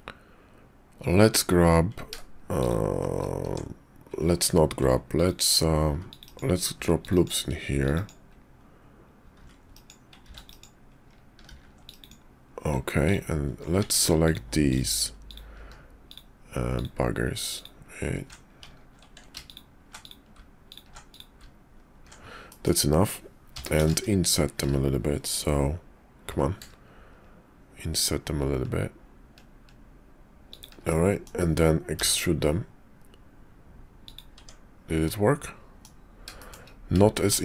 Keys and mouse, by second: 2.5 shift+click, 3.4 Tab, 4.8 ctrl+r, 5.8 ctrl+r, 6.7 ctrl+r, 7.7 ctrl+r, 9.3 ctrl+r, 10.2 ctrl+r, 11.4 ctrl+r, 13.0 alt+click, 13.8 Tab, 14.2 alt+click, 14.7 alt+click, 16.1 alt+shift+click, 17.5 alt+shift+click, 18.6 ctrl+z, 20.0 shift+click, 20.7 alt+shift+click, 21.1 shift+click, 22.4 click, 24.3 i, 27.2 i, 30.9 click, 32.8 e, 34.4 Tab, 35.0 click, 36.4 shift+click, 37.1 shift+click.